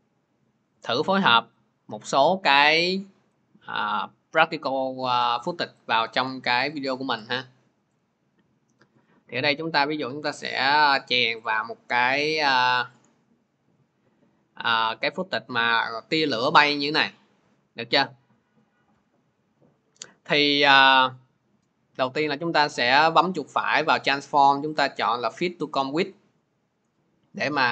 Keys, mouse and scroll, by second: 0.3 middle click, 3.4 middle click, 4.1 middle click, 5.7 ctrl+click, 6.5 click, 7.9 click, 8.8 click, 11.2 click, 14.0 middle click, 19.9 click, 21.1 middle click, 23.3 right click, 25.5-27.3 middle drag, 25.5-27.3 right drag, 27.3-27.7 drag.